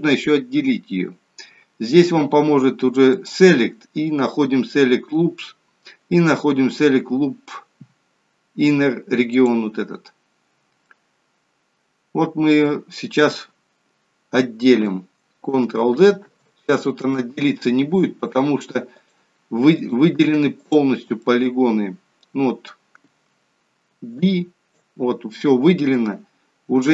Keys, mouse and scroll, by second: 3.3 click, 11.2 middle click, 15.7 ctrl+z, 16.2 ctrl+z, 19.0 click, 19.7 click, 21.2 middle click, 23.8 b, 25.4 middle click.